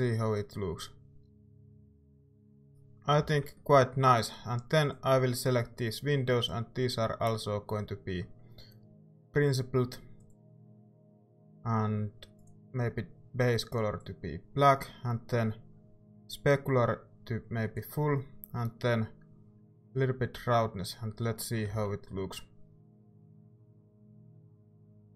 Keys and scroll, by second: 3.5 z, 21.7 z.